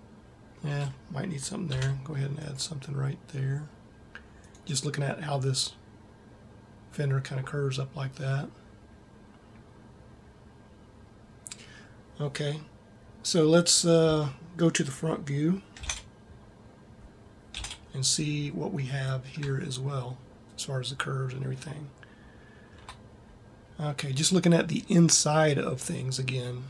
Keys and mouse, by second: 1.5 ctrl+r, 4.6-6.7 drag, 13.9 a, 15.9 ctrl+Up, 17.4 ctrl+Up.